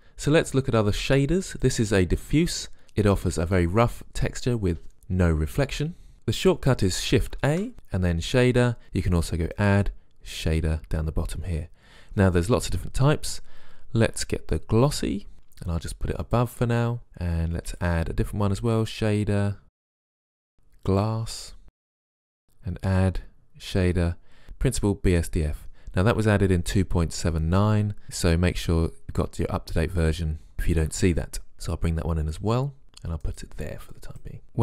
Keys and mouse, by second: 0.4 click, 7.5 shift+a.